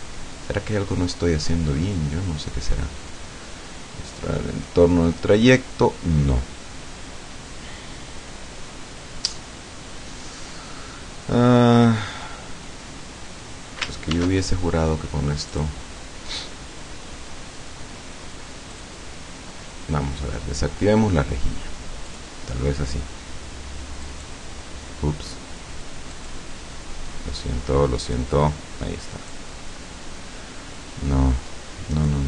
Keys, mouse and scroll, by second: 14.2 ctrl+shift+d, 15.5 click, 18.7 click, 22.1 click, 24.1 click, 26.2 click, 28.1 click, 29.3-32.2 drag.